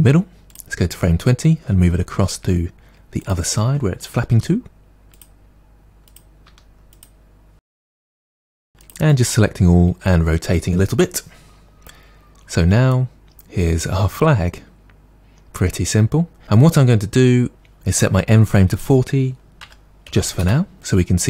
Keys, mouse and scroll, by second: 0.5 click, 3.2 click, 4.2 r, 5.3 click, 5.4-8.3 typing, 5.9 click, 6.5 click, 7.1 click, 7.6 click, 8.2 click, 8.9 click, 14.3-21.2 drag, 20.5 Return.